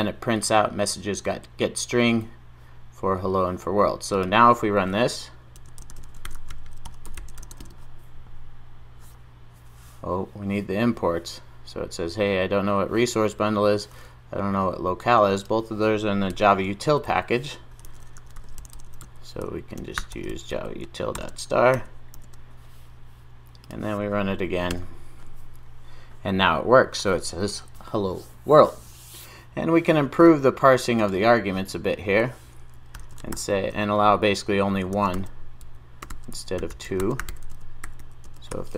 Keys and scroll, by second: 22.2 super+s.